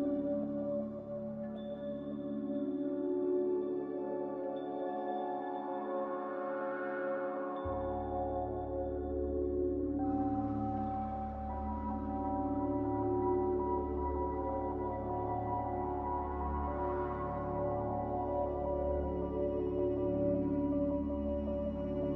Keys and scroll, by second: 10.5 a, 14.0 ctrl+z.